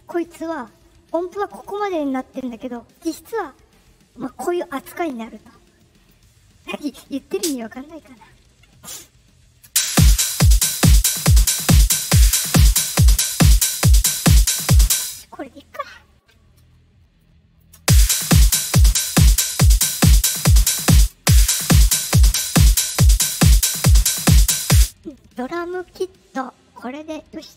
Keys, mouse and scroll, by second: 0.1 right click, 2.1-3.2 drag, 5.7 click, 6.7 right click, 6.9 right click, 7.3 click, 8.8 middle click, 9.6 space, 14.8 space, 17.1-17.5 drag, 17.7 space, 19.4 click, 19.8 click, 20.9 space, 21.1 space, 24.6 space.